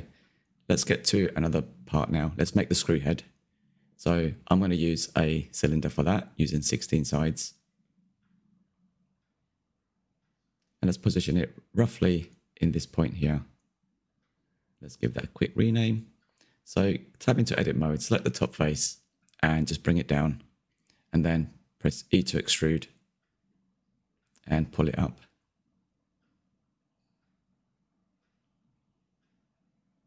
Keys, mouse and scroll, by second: 0.7-1.3 scroll up 2, 1.3-4.1 shift+middle drag, 4.1 shift+a, 7.4-11.0 drag, 11.0 KP_3, 11.6-12.0 scroll up 4, 12.0 click, 12.4-12.8 shift+middle drag, 12.8 click, 13.4 /, 13.6 click, 13.7 middle click, 14.2-15.5 drag, 16.2-16.8 shift+middle drag, 16.8 scroll up 1, 17.0 Tab, 17.1 shift+middle click, 17.4 click, 18.0-19.7 drag, 21.4-22.5 middle drag, 22.5 click, 26.0-27.7 middle drag, 27.7-28.3 scroll up 3, 28.3-29.7 middle drag, 29.7 e.